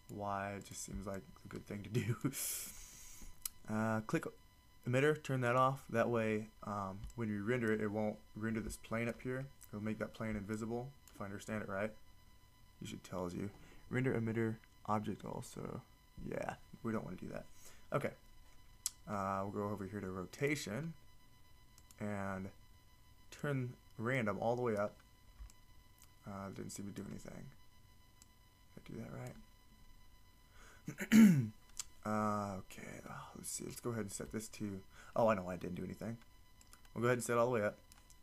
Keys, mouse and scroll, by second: 20.4-25.6 drag, 28.2-38.2 drag.